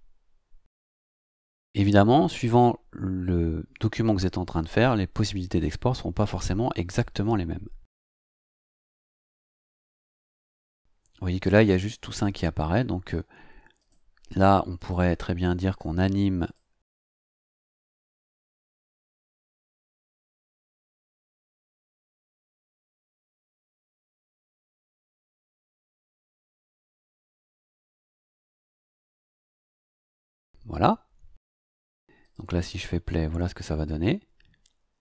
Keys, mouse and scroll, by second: 8.1 click, 9.5 click, 13.7 click, 14.7 click, 16.4 click, 18.1 click, 20.2 click, 24.7 click, 25.3 click, 26.3 click, 28.0 click, 32.2 click.